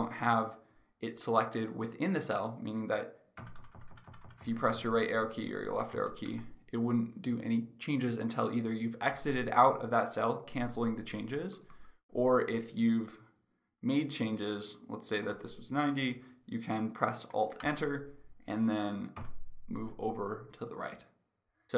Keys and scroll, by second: 3.4 Right, 5.3 Left, 6.0 Right, 6.4 Left, 9.2 Escape, 17.7 ctrl+Return, 19.1 Right.